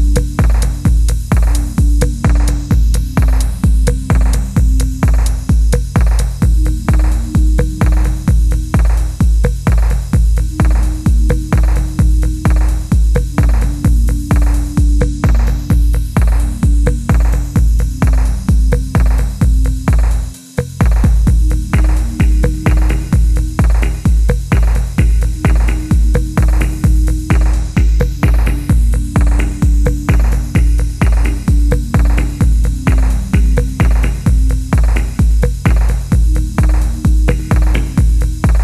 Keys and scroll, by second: 0.4 l, 1.2 ctrl+v, 1.8 3, 2.5 g, 4.2 g, 4.5 f, 6.7 typing, 8.3-9.9 typing, 11.1 ctrl+z, 11.2 ctrl+z, 11.3 ctrl+z, 11.4-12.4 ctrl+z, 13.6 i, 14.9 s, 18.2-20.2 typing, 22.0 typing, 23.7-27.8 typing, 29.1 typing, 30.6 typing, 32.1 typing, 34.5 g, 35.7 g.